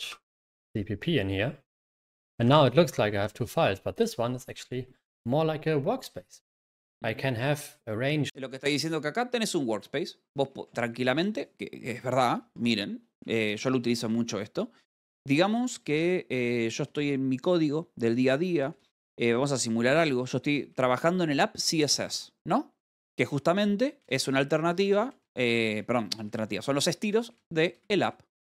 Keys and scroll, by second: 14.1-15.0 typing, 16.8 Return, 20.4 Return, 23.7 :, 24.5 Return.